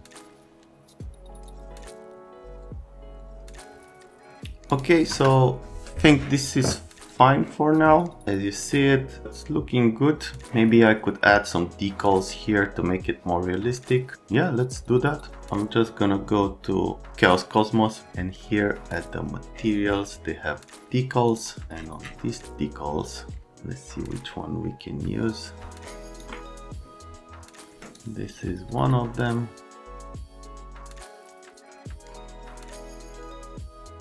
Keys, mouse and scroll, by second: 4.6 middle click, 4.7 click, 5.1 F3, 7.1 click, 18.8 scroll down 1, 21.2 scroll down 1, 25.8 click, 29.6 click, 29.9 middle click, 30.2 F3, 30.3 right click, 30.5 click, 31.6 click, 32.3 right click, 32.5 click, 32.6 right click, 32.9 click, 32.9-33.7 typing, 33.5 click, 33.8 click.